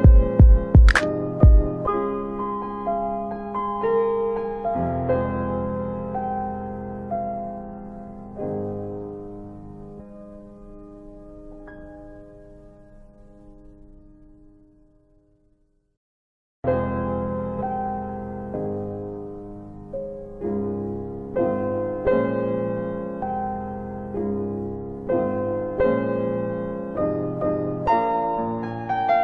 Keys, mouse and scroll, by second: 8.6 click, 14.2 click, 14.6 click, 16.0-16.9 typing, 18.1 click, 22.2 click, 28.2 alt+click, 28.9 alt+right click.